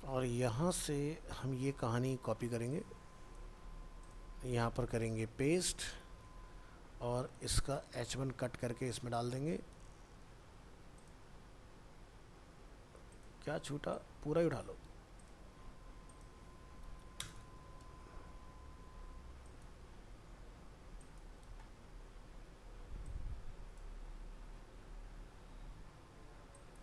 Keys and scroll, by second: 3.7 ctrl+c, 6.2 ctrl+v, 8.3 ctrl+x, 9.7 ctrl+v, 14.8 ctrl+c, 17.4 ctrl+v, 20.1 ctrl+x, 21.4 ctrl+v.